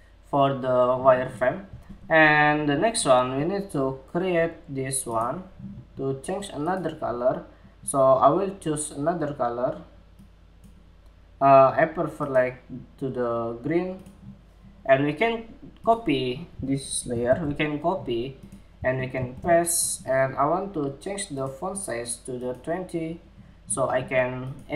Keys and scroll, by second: 16.6 super+c, 16.8 super+c, 18.7 shift+super+v.